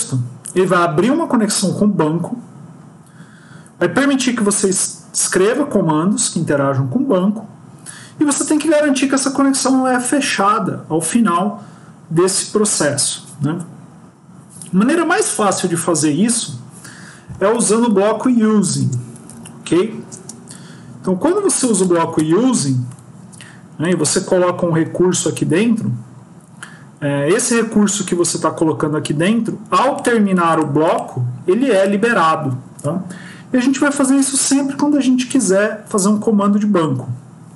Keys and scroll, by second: 21.2 BackSpace.